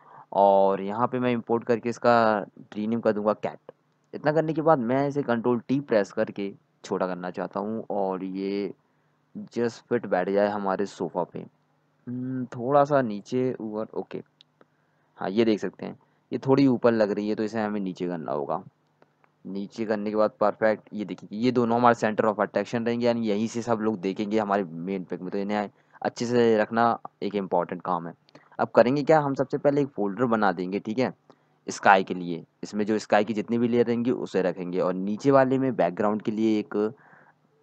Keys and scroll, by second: 4.5-5.4 typing, 8.4 ctrl+t, 14.2 Down, 14.3 Down, 14.5 Down, 14.8 Down, 14.9 Down, 15.1 Down, 15.3 Up, 33.2-34.3 typing.